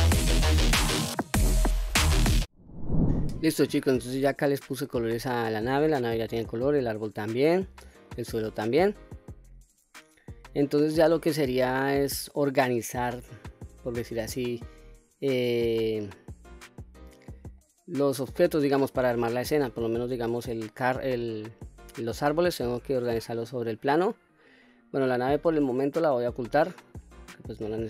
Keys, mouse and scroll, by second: 0.0 middle click, 0.0 shift+middle click, 0.0 scroll up 2, 0.2 l, 0.6 click, 0.8 click, 0.9 click, 1.0 click, 1.5 click, 1.6 middle click, 1.6 scroll down 2, 1.7 Tab, 1.7 middle click, 2.0 scroll up 8, 2.2 click, 2.2 scroll down 3, 2.2 click, 4.7-5.1 scroll down 1, 5.3 shift+middle drag, 6.1-6.8 middle drag, 6.9 scroll down 1, 7.2 scroll up 4, 8.0-8.4 shift+middle drag, 8.8-9.5 scroll down 3, 9.5-10.6 scroll up 4, 10.6-11.1 middle drag, 11.6-12.0 shift+middle drag, 12.3-12.7 scroll down 2, 12.9-13.4 middle drag, 15.3 click, 16.2-16.5 scroll up 3, 16.8-17.2 scroll up 1, 17.2-18.0 middle drag, 19.0-19.5 middle drag, 20.0-20.7 middle drag, 21.8 click, 25.4 click, 27.3 click.